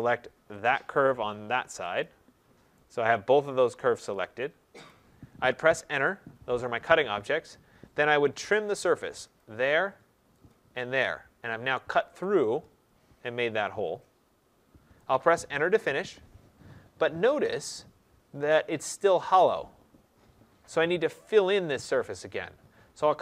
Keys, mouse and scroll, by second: 0.6 click, 0.6-1.2 scroll, 2.0 click, 4.8 right click, 6.0 Return, 9.3 click, 10.4 click, 11.4 middle click, 11.5 middle click, 14.9 right click, 15.9 Return, 16.8 middle click, 16.9 middle click, 17.0 middle click, 20.6 right click.